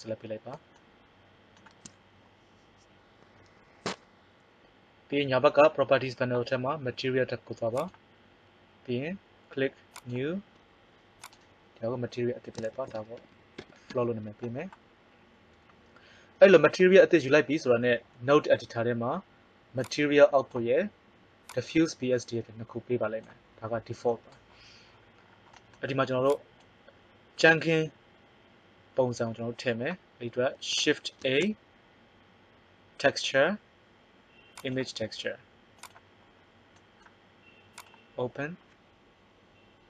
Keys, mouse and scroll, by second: 7.7-13.3 drag, 13.3 o, 23.1 click, 26.2-27.4 drag, 27.4 right click, 31.2 shift+a, 37.7-38.9 drag.